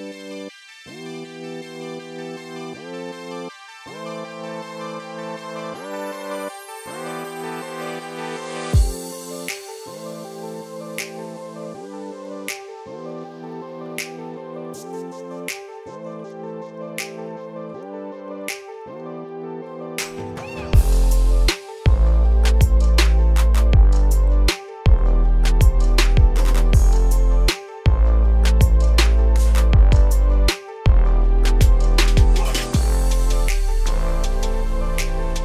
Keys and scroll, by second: 14.1 ctrl+a.